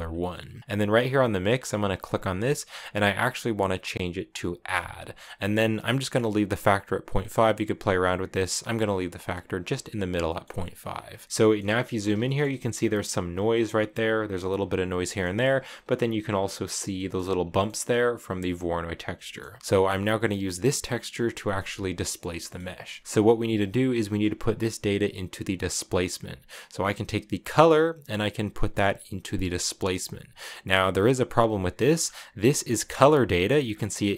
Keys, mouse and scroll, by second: 0.2 scroll up 3, 0.3 scroll down 1, 0.4 middle click, 1.8-4.9 drag, 6.2-8.4 drag, 9.9 scroll up 1, 9.9 scroll down 2, 10.0 middle click, 10.6 click, 11.2 shift+middle click, 11.4-12.0 scroll up 5, 12.0-13.4 shift+middle drag, 13.4 scroll down 1, 13.5-17.1 shift+middle drag, 15.1 scroll down 1, 17.1 scroll down 2, 17.2-19.5 middle drag, 19.5 scroll down 4, 19.6 shift+middle click, 19.9 scroll up 1, 20.0-20.9 scroll down 1, 20.9 scroll up 1, 21.2 shift+middle click, 21.3-22.6 scroll down 6, 22.1-22.5 middle drag, 22.6-23.0 middle drag, 23.0-25.9 scroll up 3, 27.3-30.3 drag, 31.5 middle click, 31.7 scroll up 2, 31.8 scroll down 1, 31.8-32.3 scroll up 1, 32.7-33.9 drag.